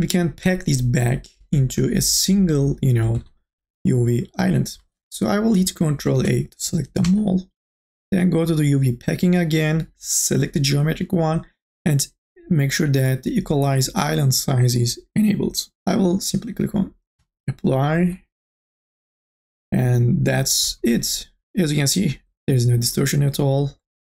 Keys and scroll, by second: 6.4 ctrl+a.